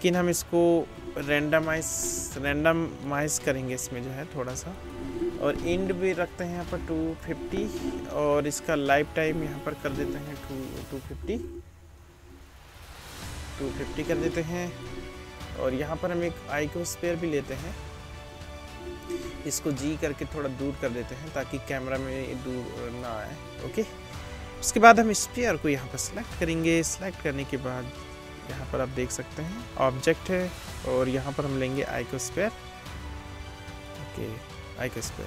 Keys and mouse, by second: 3.3-4.7 drag, 6.1 BackSpace, 8.5 click, 9.2-14.9 middle drag, 10.3 BackSpace, 14.9-15.9 drag, 15.9-20.8 middle drag, 19.5 g, 20.8-25.6 drag, 22.2 s, 25.6 middle click, 25.7-28.6 drag, 28.6-31.9 middle drag, 31.9 click, 32.4-35.2 middle drag.